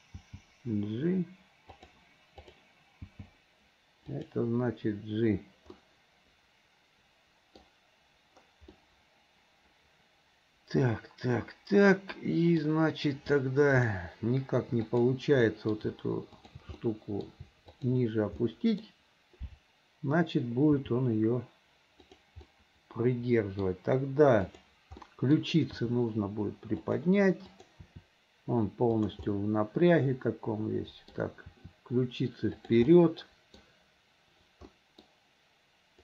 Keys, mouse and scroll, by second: 1.3 g, 2.4 click, 3.3 g, 5.8-8.0 middle drag, 8.8 scroll up 1, 8.8-12.6 middle drag, 13.8 shift+middle click, 14.9 click, 15.5-15.8 middle drag, 16.3 shift+click, 16.8-17.3 middle drag, 17.7 shift+click, 18.4-18.9 middle drag, 21.8 g, 22.5-23.9 middle drag, 24.5 click, 25.1 middle click, 27.1 r, 27.5 click, 29.0 r, 29.3-31.2 middle drag, 32.1 r, 32.9 middle click, 34.8 middle drag.